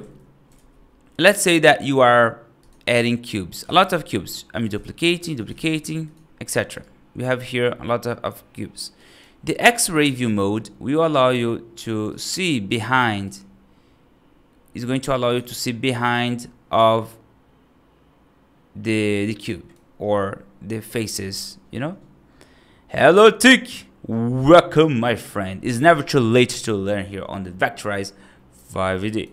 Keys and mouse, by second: 0.4 shift+a, 2.8 right click, 3.5 shift+d, 4.6 shift+d, 5.5 shift+d, 6.7-8.6 right drag, 8.8 right drag, 10.0 click, 12.9 click, 13.1 click, 15.1 click, 16.0 click, 16.6-19.0 right drag, 19.3 right drag, 28.4 click, 28.9 right drag.